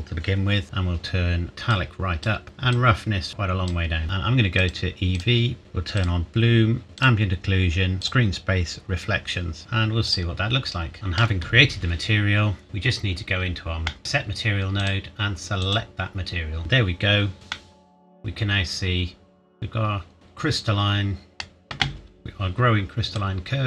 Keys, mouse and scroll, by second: 1.7 click, 5.9 click, 9.6 ctrl+s, 10.1 click, 10.9 shift+middle click, 13.1 scroll up 1, 13.9 middle click, 14.8 click, 17.5 middle click, 23.1 click.